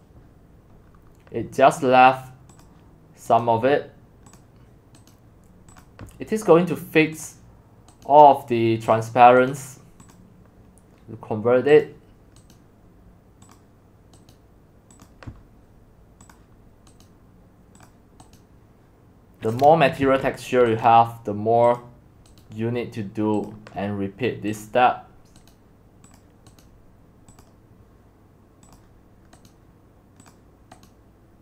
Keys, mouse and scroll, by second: 0.9-2.6 scroll down 3, 2.6 click, 3.4-4.5 right drag, 4.5 click, 5.1 right click, 5.8-8.0 drag, 8.0 right click, 8.9 click, 10.1-12.5 drag, 13.6 click, 14.8 right click, 15.0-17.0 drag, 17.0 right click, 17.9 click, 18.4-20.0 right drag, 20.0 ctrl+z, 20.8 right click, 21.7 click, 23.5-25.5 drag, 26.2-29.5 drag.